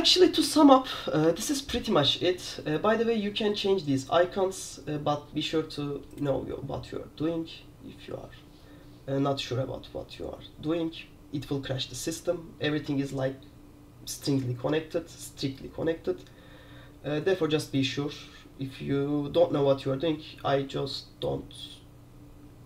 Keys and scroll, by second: 0.2 super+2, 0.5 super+3, 0.7 super+4, 1.3 super+1.